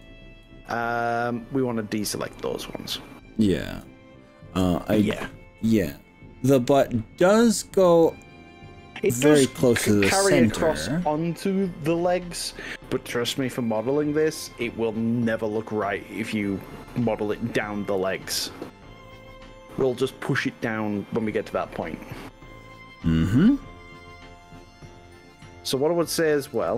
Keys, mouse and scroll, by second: 13.7-17.7 middle drag, 18.1 e, 20.3 click, 20.5-23.1 middle drag, 24.9 middle click, 26.6 ctrl+r.